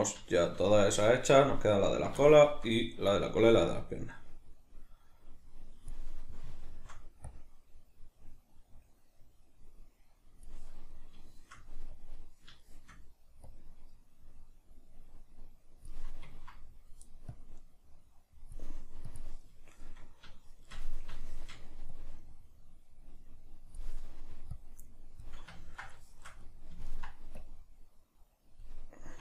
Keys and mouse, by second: 3.8-6.6 drag, 6.6-7.3 shift+middle drag, 7.3-10.9 drag, 10.9-11.9 middle drag, 11.9-12.6 drag, 12.6-13.5 shift+middle drag, 13.5-16.4 drag, 16.4-17.4 ctrl+middle drag, 17.4-19.6 drag, 19.6-22.0 shift+middle drag, 22.0-25.6 drag, 25.6-27.4 ctrl+middle drag, 27.4-29.2 drag.